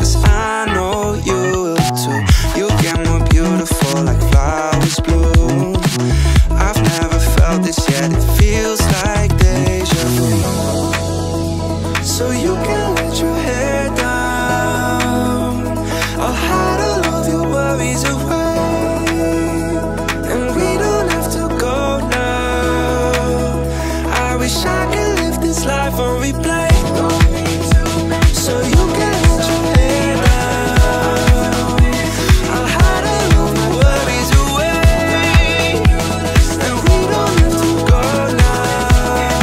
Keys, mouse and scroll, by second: 1.4 click, 2.2 ctrl+a, 4.9 click, 5.5-7.3 drag, 8.7 click, 10.4 shift+a, 13.6 click, 16.0-17.7 drag, 18.4-19.0 drag, 22.0 click, 28.9-29.7 scroll up 1, 29.9-30.7 scroll down 1, 30.7-31.6 right drag, 32.5-38.7 right drag, 38.7 shift+middle click, 38.7-39.1 scroll up 2.